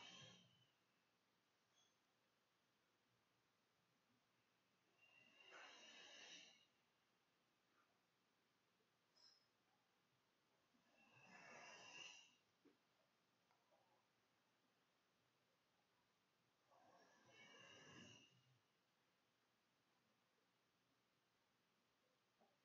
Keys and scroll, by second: 19.4 Home, 20.4 End, 20.5 Delete, 20.6 Return, 21.0 Up, 21.2 /, 21.9 /, 22.4 [.